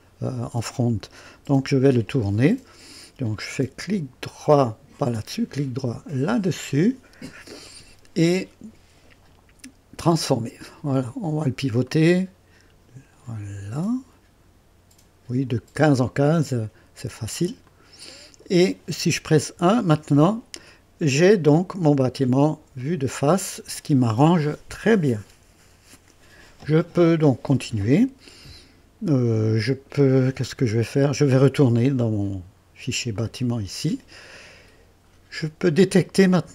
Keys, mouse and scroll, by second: 1.5 KP_2, 3.8 right click, 4.6 click, 6.3 right click, 10.1 click, 11.8-15.4 drag, 17.6 click, 19.6 KP_1, 33.1 click.